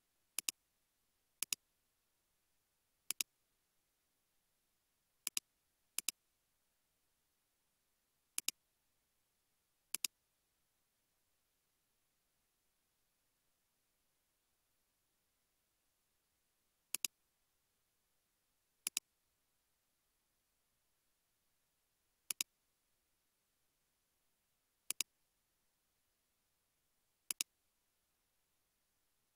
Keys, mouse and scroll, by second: 3.8 typing, 9.0-9.8 scroll up 1, 9.8 typing, 10.3 scroll down 1, 11.1-11.7 typing, 12.8 typing, 15.1 typing, 17.4 typing, 19.4 typing, 22.3 ctrl+click, 23.2 typing, 25.5 typing, 28.0 typing.